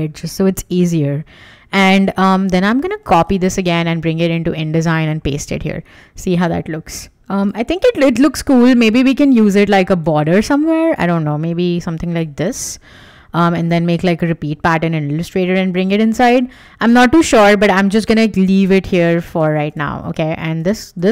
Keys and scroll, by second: 3.0 super+c, 3.4 super+Tab, 4.8 super+v, 17.0 super+z.